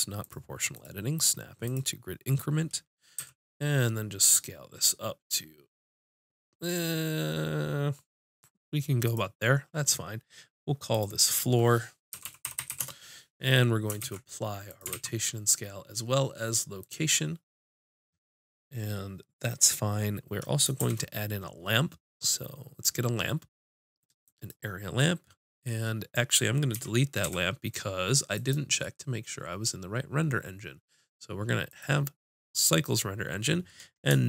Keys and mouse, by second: 3.2 s, 9.2-13.0 drag, 12.6 o, 14.0 ctrl+a, 14.9 ctrl+a, 20.8 shift+a, 26.8 x, 28.3-30.1 drag, 30.1 right click.